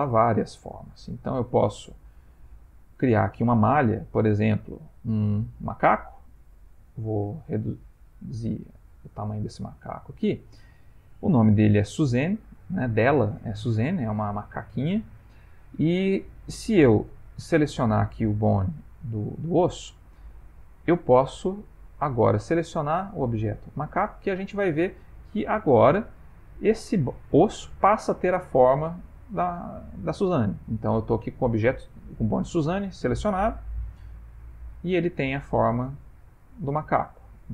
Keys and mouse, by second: 1.2 shift+right click, 2.2 shift+a, 7.3 s, 9.2 s, 13.8 middle click, 13.9 middle click, 17.6 click, 21.8 click, 24.6 middle click, 27.6 middle click, 28.9 click, 32.9 click, 33.8 click, 35.1 middle click, 37.1 r.